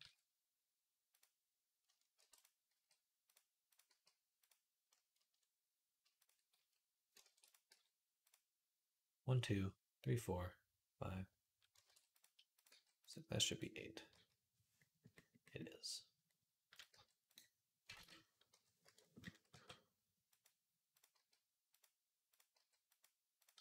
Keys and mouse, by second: 2.0 ctrl+r, 2.5 g, 3.7 g, 6.3 f, 7.1 ctrl+r, 7.2-13.3 middle drag, 7.5 g, 11.6 ctrl+r, 12.5 g, 13.3 click, 13.4-22.1 middle drag, 13.9 l, 16.5 click, 16.7 g, 17.7 ctrl+z, 18.3 ., 19.3 g, 20.9 g, 22.1 click, 22.2-23.6 middle drag, 22.4 g, 23.4 g.